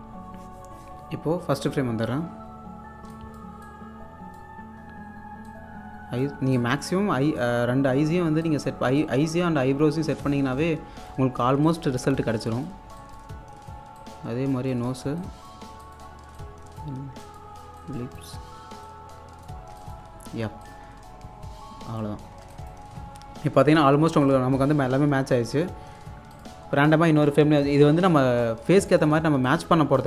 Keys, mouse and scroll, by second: 1.6 click, 2.4-2.7 scroll down 1, 3.1 scroll up 1, 3.2 alt+click, 4.9-5.5 scroll up 1, 5.5 click, 6.4 scroll down 1, 6.6 alt+click, 8.3 scroll down 1, 8.5-12.9 alt+drag, 12.0-12.9 typing, 12.9 scroll down 1, 13.0 alt+click, 13.4-14.0 scroll up 1, 14.0 click, 15.7 scroll down 1, 15.8-19.6 alt+drag, 19.8 alt+click, 20.1-20.7 scroll up 1, 20.7-22.2 drag, 22.2 scroll down 1, 22.6 alt+click, 24.3 click, 24.8 scroll up 1, 25.3-25.9 scroll down 1, 26.3 click, 27.3-28.1 scroll up 1, 28.8 scroll up 1, 28.9-30.0 alt+drag.